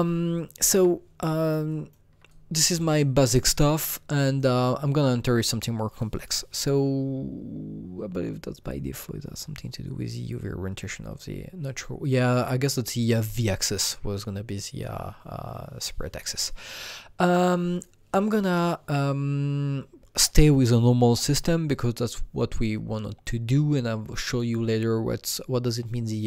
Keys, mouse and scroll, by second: 0.3-1.7 alt+drag, 1.7 alt+right click, 3.8 alt+double click, 4.4 click, 5.0 scroll down 3, 5.9 click, 17.7-20.0 scroll down 1.